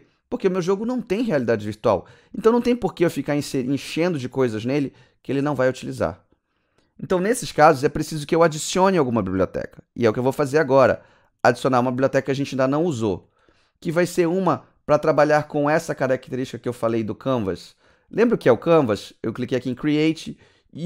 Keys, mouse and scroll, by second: 15.6 click, 16.5 scroll down 3, 17.2 click, 19.6 click.